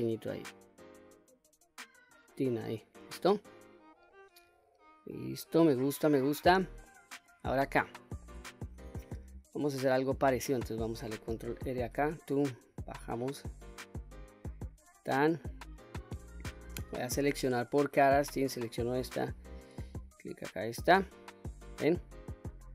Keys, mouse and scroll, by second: 2.2 click, 3.2-4.3 middle drag, 4.5-6.3 middle drag, 6.5-7.2 scroll up 2, 6.9 middle click, 7.8 shift+middle click, 8.8-10.5 middle drag, 11.5 ctrl+r, 14.8 click, 15.3-16.1 middle drag, 18.0 3, 18.5 click, 20.1 alt+click, 21.1-22.7 middle drag.